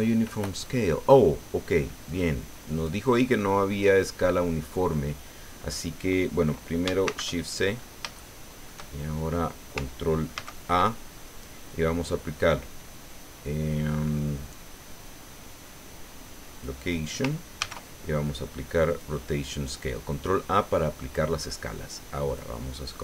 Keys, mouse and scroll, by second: 2.1 click, 2.7 click, 3.5 middle click, 4.5 scroll down 1, 4.9 middle click, 7.0 shift+c, 7.7-8.1 shift+scroll up 1, 8.1 shift+middle click, 8.9 shift+scroll down 1, 10.3 ctrl+a, 16.5 click, 17.6 ctrl+a, 18.9 click, 22.3 click.